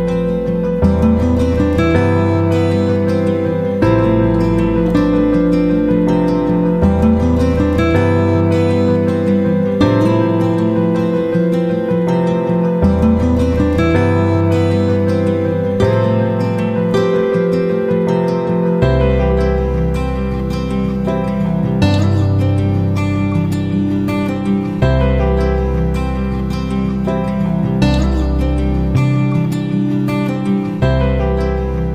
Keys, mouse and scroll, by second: 6.5 shift+click, 7.2 shift+click, 8.3-20.7 drag, 22.2 click, 24.5-31.9 drag.